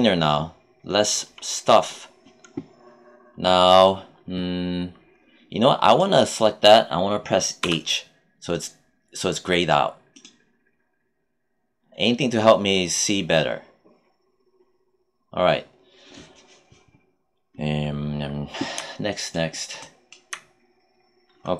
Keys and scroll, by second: 7.5 h.